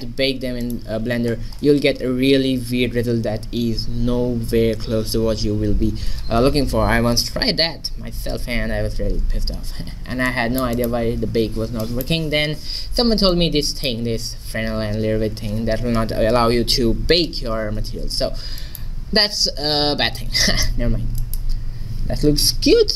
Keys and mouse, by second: 0.6-2.6 drag, 9.7-11.5 middle drag, 13.3-15.2 drag, 18.6-20.6 middle drag, 22.3-22.9 middle drag.